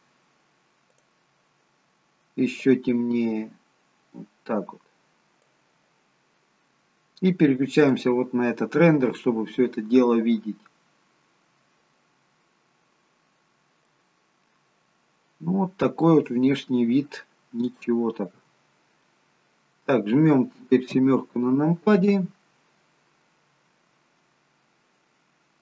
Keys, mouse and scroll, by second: 10.4 click, 12.0-12.5 scroll down 1, 13.2-13.7 scroll down 1, 13.9 middle click, 13.9-15.2 scroll up 2, 16.4-17.5 scroll up 2, 17.5 scroll down 1, 17.7 shift+middle click, 18.9 scroll down 1, 19.0 middle click, 20.9 KP_7, 23.4-23.9 scroll down 1.